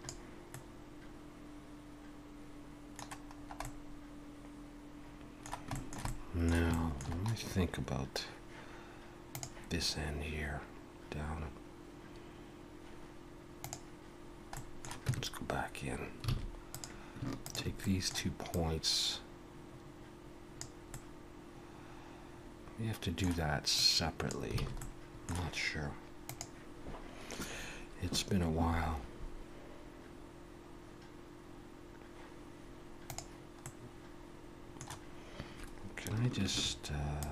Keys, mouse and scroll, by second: 0.5 middle click, 3.4 scroll up 2, 3.6 middle click, 5.7 shift+middle click, 6.1 middle click, 6.7 shift+middle click, 14.5 middle click, 15.1 Tab, 16.3 alt+a, 16.7 click, 17.4 shift+click, 17.8 middle click, 18.5 click, 20.9 middle click, 23.8 click, 24.6 alt+a, 24.8 middle click, 33.6 middle click, 36.5 ctrl+r.